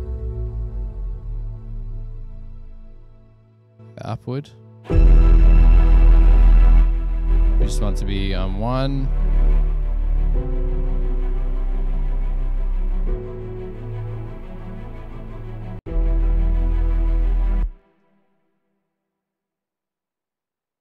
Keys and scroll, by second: 17.8 space, 17.9 Return, 18.1 Return.